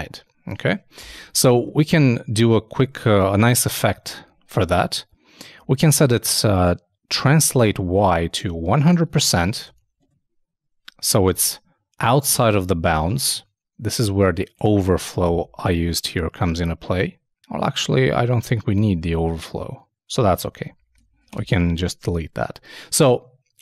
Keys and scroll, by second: 1.5 super+Left, 4.8 shift+Left, 5.6 shift+Right, 9.1 shift+0, 9.7 shift+super+5, 10.0 super+Tab, 12.9 super+Tab, 15.2 super+/, 15.4 super+s, 15.5 super+Tab, 20.0 super+Tab, 20.7 super+Left, 21.0 shift+super+Down, 21.3 shift+BackSpace, 21.6 super+s.